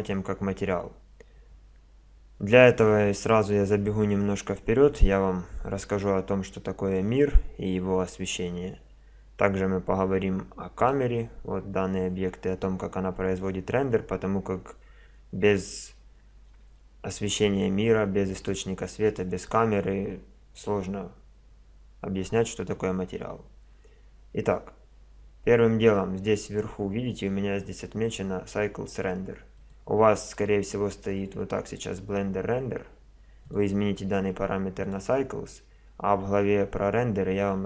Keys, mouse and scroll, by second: 7.0-8.9 drag, 9.0 click, 10.8-12.6 middle drag, 18.4-22.3 right drag, 29.6-31.4 drag, 33.4-35.2 drag.